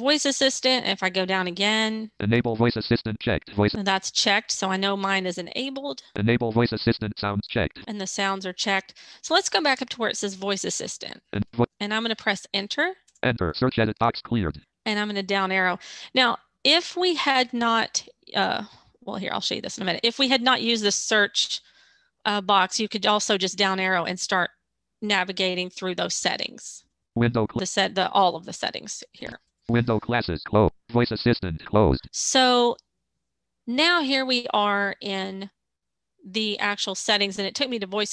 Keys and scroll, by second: 12.0 Return.